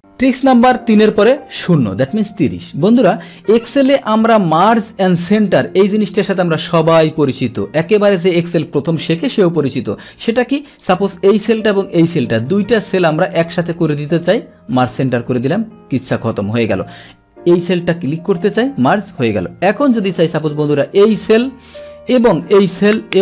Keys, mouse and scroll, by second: 3.7-5.8 drag, 6.1 click, 6.7-8.0 drag, 10.5 click, 11.4 click, 12.0 click, 12.4 click, 12.9-23.2 drag.